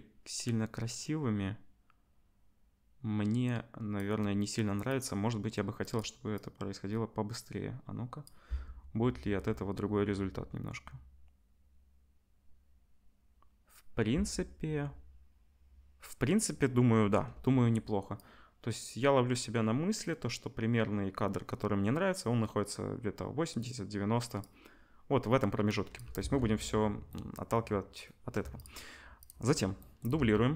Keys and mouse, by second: 5.0-5.8 middle drag, 5.8 click, 5.9 middle click, 6.3-28.6 drag, 9.2 space, 14.1 space, 26.2 ctrl+s, 28.6 shift+middle click, 29.2 shift+click, 29.2-30.5 shift+middle drag, 30.1 shift+d.